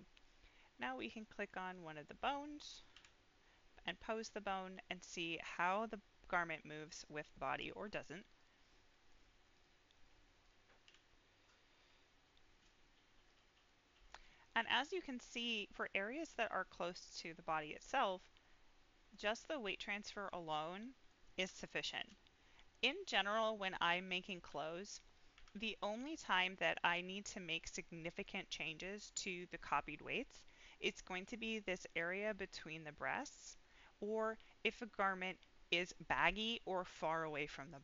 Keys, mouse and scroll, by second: 1.1 click, 1.7-2.9 drag, 2.9 r, 6.8 right click, 7.2 scroll down 1, 7.4 middle click, 8.3 click, 8.8 middle click, 9.5 click, 10.4 click, 10.8 r, 13.2 click, 13.6-15.7 middle drag, 16.0 scroll up 1, 16.3-21.0 middle drag, 21.6-22.0 shift+middle drag, 22.5 scroll down 1, 22.8 middle click, 23.7-24.1 middle drag, 24.4 s, 25.0 right click, 25.3 a, 26.2-27.2 drag, 27.5-28.2 middle drag, 28.8 middle click, 29.6 click, 30.0 middle click, 30.5-30.8 scroll up 2, 30.8 middle click, 31.2-31.6 scroll up 2, 31.6 middle click, 33.1-33.6 scroll down 2, 33.6 middle click, 34.4 middle click.